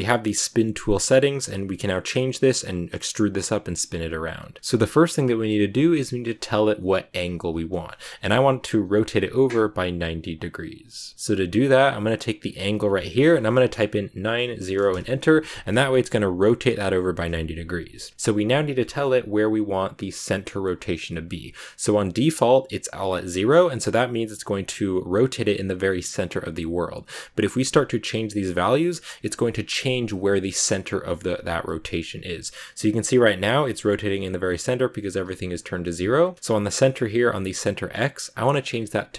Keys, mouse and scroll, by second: 4.6 click, 12.3-15.5 drag, 27.1-28.9 drag, 29.6-31.4 drag, 38.0-39.1 drag.